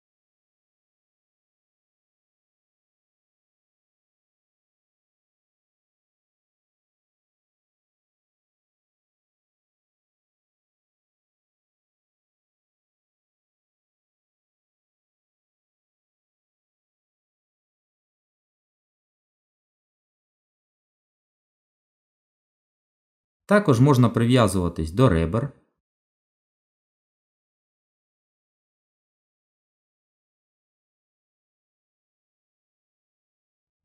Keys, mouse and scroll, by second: 1.7 ctrl+z, 4.1 click, 4.7 middle click, 6.1 click, 6.6 middle click, 8.4 g, 15.1 ctrl+z, 15.6 middle click, 18.8 Tab, 24.3 click, 29.4 middle click, 32.6 g.